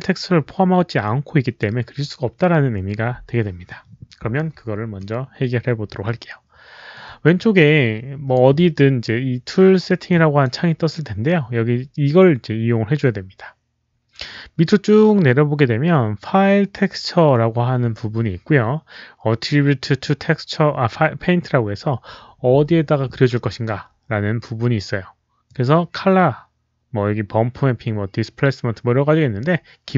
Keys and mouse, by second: 7.3-8.2 drag, 10.0-10.3 drag, 13.1 click, 25.4 click, 29.1 click.